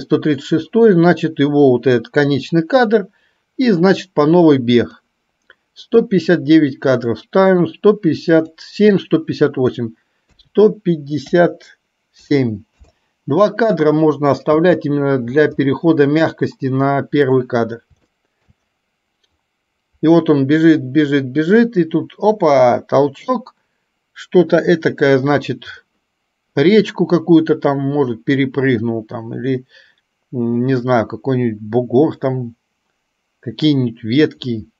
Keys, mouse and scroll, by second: 4.9 click, 8.4-12.9 drag, 14.7 space, 18.2-18.7 shift+middle drag, 34.5-34.7 middle drag.